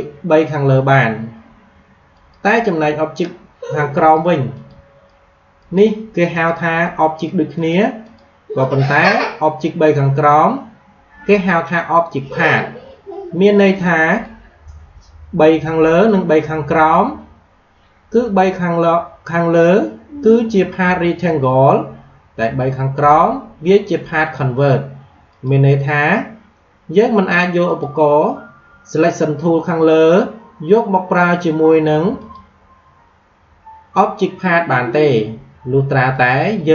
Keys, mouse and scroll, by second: 2.0 click, 13.5-22.3 drag, 22.3-27.4 drag, 27.5 click, 32.1 click, 36.1 click.